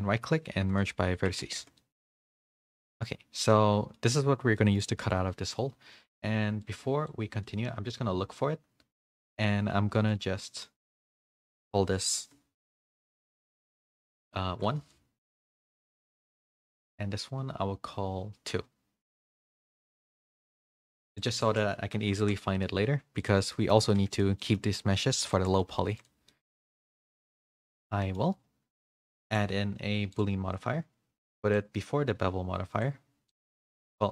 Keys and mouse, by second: 1.1 Tab, 1.6 a, 1.7 middle drag, 2.1 a, 2.3 a, 2.4 middle click, 2.8 click, 3.1-3.9 middle drag, 4.5 middle drag, 4.9 click, 9.9 middle click, 11.9-15.2 shift+drag, 21.2-22.5 drag, 23.5 middle drag, 23.8 a, 23.9 a, 24.4 middle drag, 25.3 shift+middle drag, 25.6 a, 25.8 a, 26.0-26.3 drag, 26.3 middle click, 26.8 click, 27.4-28.1 middle drag, 29.3-30.2 drag, 31.5-32.8 drag, 33.3 middle click.